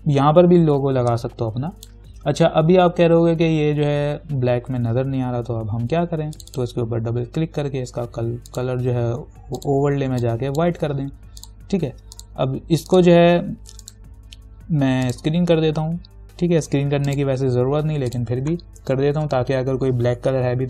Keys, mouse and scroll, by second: 1.3-11.6 drag, 19.3 ctrl+-.